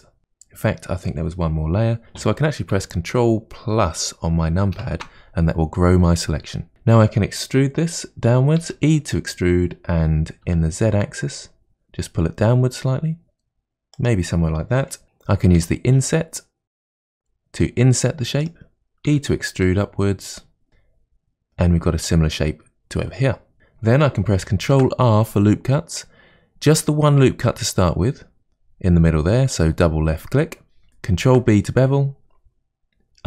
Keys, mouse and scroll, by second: 0.2 middle click, 4.8 ctrl+KP_Add, 6.7 ctrl+z, 8.6 e, 15.6 i, 19.1 e, 20.7-23.2 middle drag, 23.6-24.6 scroll up 1, 24.6 ctrl+r, 31.2 ctrl+b.